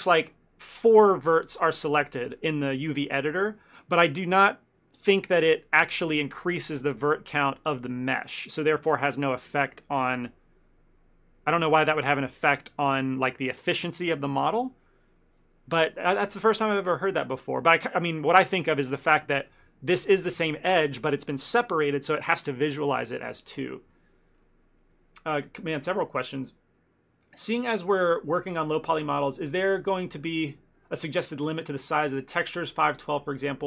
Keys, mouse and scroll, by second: 3.4 middle click, 19.6 click, 20.1 click.